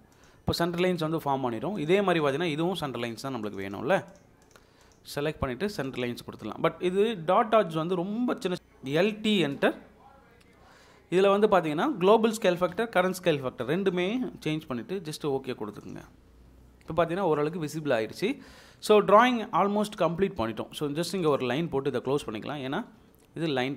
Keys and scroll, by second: 6.9 Escape, 8.6 Escape, 8.6-9.7 typing, 12.8 3, 22.7 Escape.